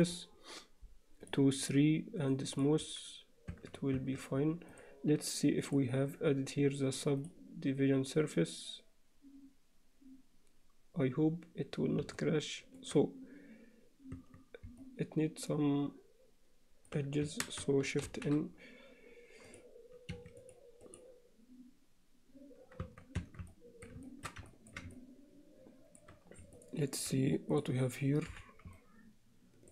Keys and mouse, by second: 3.5 Tab, 4.0 Tab, 5.8-11.3 drag, 12.2-12.8 alt+middle drag, 14.3 Tab, 14.9-16.9 alt+middle drag, 17.6 shift+a, 22.0 Escape, 22.9 Tab, 23.2 Tab, 23.5 alt+middle click, 24.1 shift+middle click, 24.5 ctrl+alt+middle click, 25.0-26.0 alt+middle drag, 26.6 alt+middle click, 27.5 click, 28.3 h, 28.8 alt+middle click.